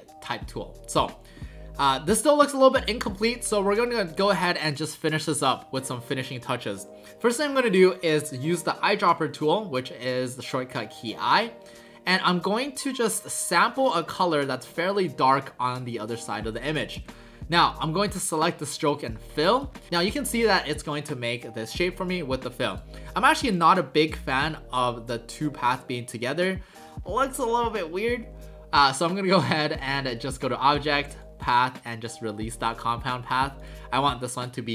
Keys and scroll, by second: 16.9 v.